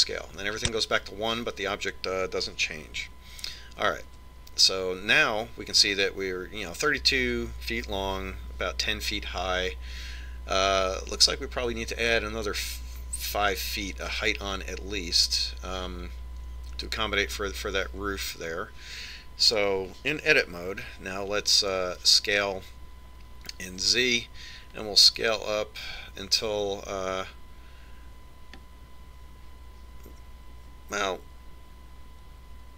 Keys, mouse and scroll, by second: 5.2 Tab, 23.2 s.